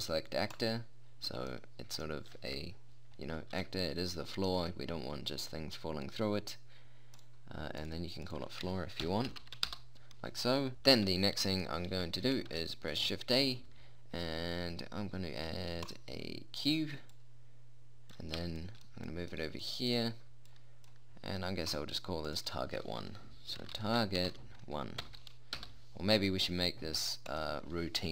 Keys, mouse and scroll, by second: 1.0-2.2 middle drag, 4.7 right click, 9.9 o, 11.4 a, 12.1 middle click, 13.0 shift+a, 17.6 middle click, 21.1-25.1 drag, 27.7-28.1 drag.